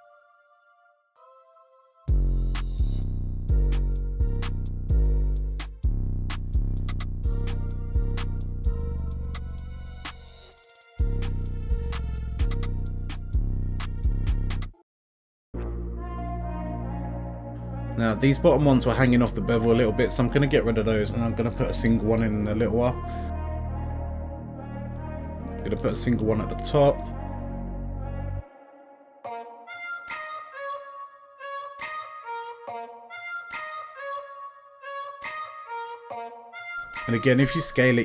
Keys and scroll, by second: 19.0 x, 28.1 s, 36.6 s, 36.9 y.